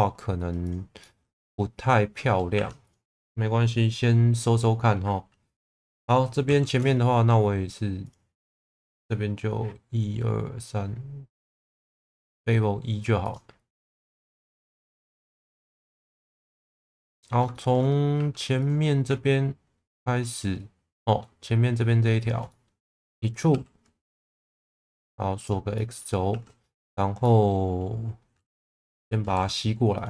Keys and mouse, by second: 0.6 click, 1.0 middle click, 2.5 1, 2.9 click, 6.4 ctrl+shift+b, 8.0-9.5 drag, 13.2 click, 14.2 middle click, 15.8 middle click, 16.4 middle click, 17.1 middle click, 17.5 shift+middle click, 18.1 2, 20.2 middle click, 22.5 middle click, 23.5 e, 24.5 x, 25.7 middle click, 26.3 1, 26.9 click, 27.2 middle click, 29.2 g, 29.3 b, 29.9 click.